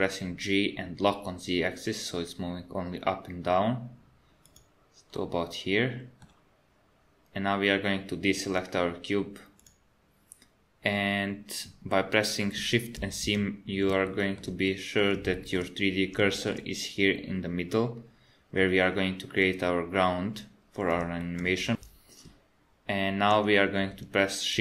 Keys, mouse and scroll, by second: 5.2 middle click, 9.6 click, 13.0 shift+c, 14.1 shift+middle click, 14.7 middle click, 15.3 shift+middle click, 15.8 scroll up 2, 16.3 shift+middle click, 21.2 shift+middle click.